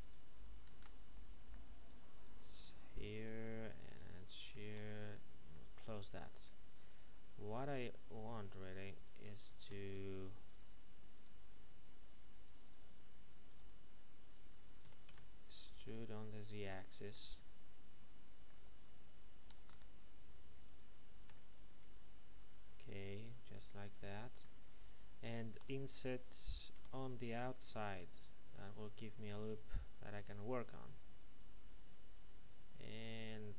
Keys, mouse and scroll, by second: 0.0 right click, 0.7 ctrl+Tab, 1.2 click, 1.7 right click, 4.8 f, 5.5 middle click, 7.0 a, 7.6 alt+shift+right click, 13.9 ctrl+right click, 14.8 typing, 16.7 click, 17.1 middle click, 19.7 ctrl+Tab, 20.2 click, 21.2 alt+shift+right click, 21.3 middle click, 25.6 i.